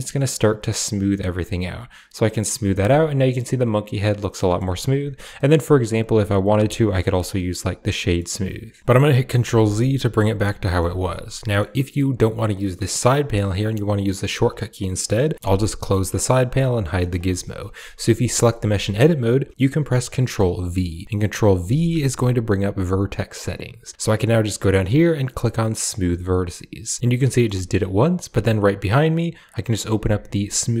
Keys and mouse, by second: 2.5 Tab, 2.7-4.4 middle drag, 5.2 middle click, 6.3 w, 7.9 click, 9.3 ctrl+z, 10.1 a, 10.5 shift+click, 11.3 click, 14.8 middle click, 15.3 t, 16.6 click, 17.1 shift+middle click, 17.6 a, 17.9 a, 18.2 middle click, 18.4 shift+click, 21.4 ctrl+v, 27.0 middle click, 28.6 click, 29.8 click.